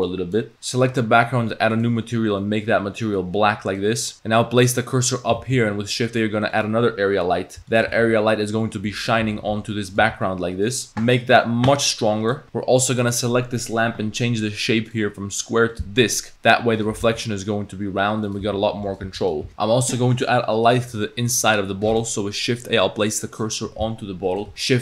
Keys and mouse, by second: 0.5 ctrl+z, 4.7 click, 5.4 shift+a, 7.6 r, 9.1 r, 9.2 g, 10.0 g, 10.9-12.3 drag, 14.9-15.8 drag, 16.3 s, 17.0 g, 18.4 s, 19.0 g, 20.7 click, 21.9 shift+s, 24.5 ctrl+z, 24.5 shift+a.